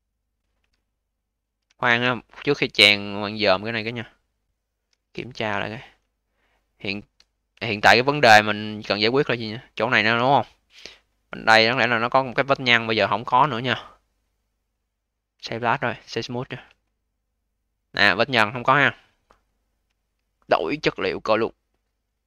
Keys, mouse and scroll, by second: 4.3 click, 4.8 q, 5.2 v, 5.5-6.1 scroll down 4, 6.1-7.2 alt+middle drag, 7.2-7.6 scroll down 3, 7.6 alt+middle click, 8.0 alt+click, 8.5-8.9 alt+middle drag, 8.9-9.4 alt+drag, 9.4-10.2 scroll up 7, 10.2-11.0 alt+drag, 11.7 click, 12.3-13.2 alt+drag, 13.2 a, 14.6 click, 15.0-16.3 right drag, 16.3-16.7 scroll up 2, 16.7-17.2 alt+middle drag, 17.2-19.9 alt+drag, 19.9 alt+middle click, 20.7 click.